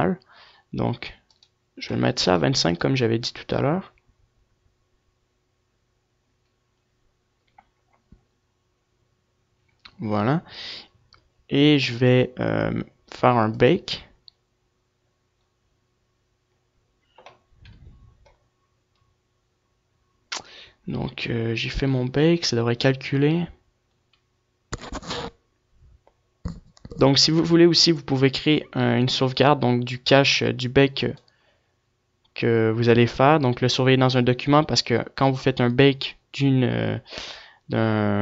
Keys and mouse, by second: 0.6 F11, 1.1-12.0 drag, 33.4-38.2 drag.